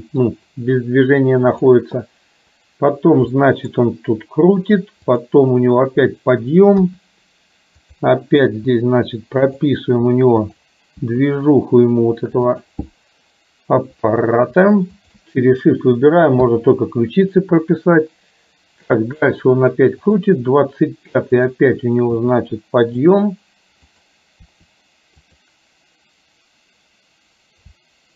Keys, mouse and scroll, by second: 1.8 click, 3.4 middle click, 5.3 click, 6.9 KP_1, 7.9 click, 8.4 r, 10.4 click, 11.1 r, 16.5 i, 19.1 click, 20.3 click, 21.5 click, 22.3 r, 24.0 click, 24.5 r.